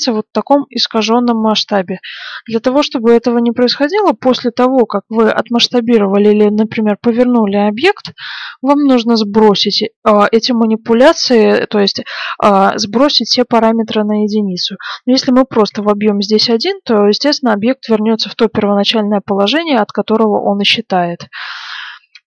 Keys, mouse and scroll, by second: 3.0-4.7 middle drag, 11.5-13.3 middle drag, 15.0-16.9 drag, 21.9 ctrl+z.